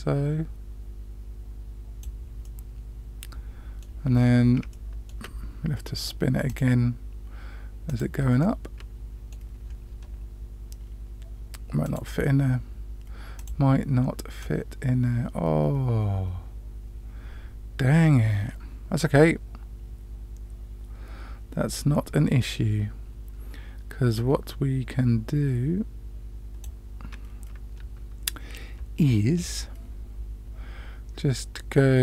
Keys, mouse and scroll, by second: 2.4-3.9 middle drag, 4.1-4.5 scroll up 2, 4.7 shift+middle click, 6.4 click, 7.9 click, 8.4-9.4 middle drag, 11.8 click, 13.3 click, 14.4-26.6 drag.